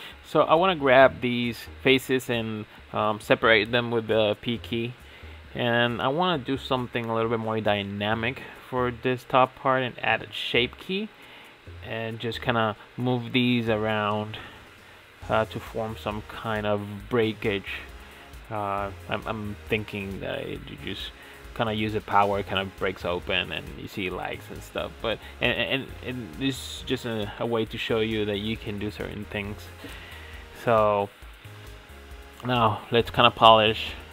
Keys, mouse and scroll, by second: 0.3 p, 1.0 Tab, 1.2 click, 1.7-3.2 middle drag, 3.2 click, 4.1 click, 5.2 click, 6.2-7.1 middle drag, 7.1 click, 8.0 shift+click, 9.3 ctrl+j, 10.6 click, 11.2 click, 12.1 scroll down 2, 12.3 click, 12.6-13.6 middle drag, 13.6 ctrl+z, 14.0 ctrl+z, 14.5 ctrl+z, 14.5 middle click, 14.9 g, 15.8-16.8 middle drag, 16.8 shift+click, 17.5 ctrl+j, 19.8 click, 21.3-22.5 scroll up 25, 22.5 click, 23.3-26.9 drag, 27.4-27.7 shift+middle drag, 27.7 scroll up 1, 27.8 scroll down 4, 28.1-28.5 shift+middle drag, 28.6 middle click, 28.7 click, 28.8 middle click, 29.5-30.1 drag, 30.1-30.5 shift+middle drag, 30.5 click, 30.6 scroll down 2, 30.7 Tab, 30.8 middle click, 31.1 click, 31.3 scroll up 1, 31.5 1, 31.6 scroll down 3, 32.1 ctrl+a, 32.8 click, 32.9 ctrl+a, 33.7 g, 34.0 shift+middle click.